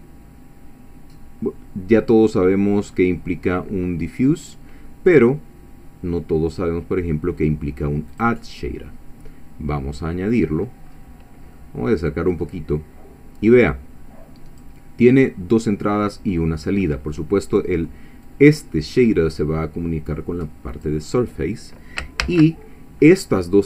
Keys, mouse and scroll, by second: 8.1 click, 10.3 click, 10.9-11.5 scroll up 2, 11.5 middle click, 12.3-12.7 scroll up 1, 12.7-13.7 scroll down 2, 13.7-14.8 drag, 18.3-21.0 drag, 22.2 shift+a.